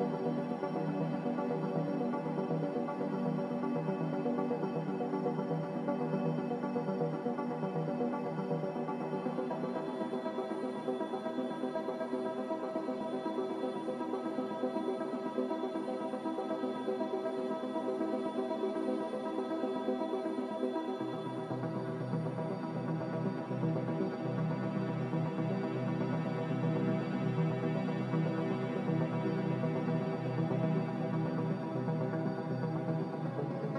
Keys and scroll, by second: 0.2 ctrl+z, 1.5-2.5 typing, 1.7 Return, 4.7 a, 5.9 2, 6.6 3, 18.0 a, 27.4 a, 29.1 ctrl+c, 29.6 ctrl+v, 30.9 ctrl+v, 32.9 n.